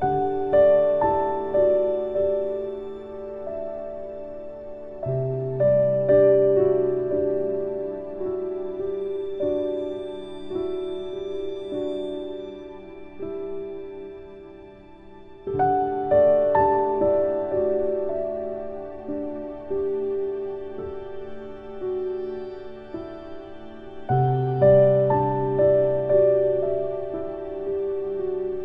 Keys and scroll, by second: 19.3 ctrl+z.